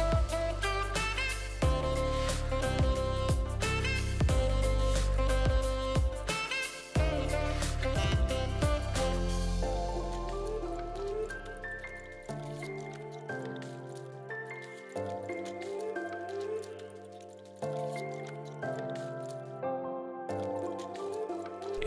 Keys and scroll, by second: 7.6 v, 9.5 r, 11.8 v, 12.7 r, 14.7 ctrl+d, 14.8 ctrl+d, 15.0 ctrl+d, 15.5 v, 16.2 alt+v.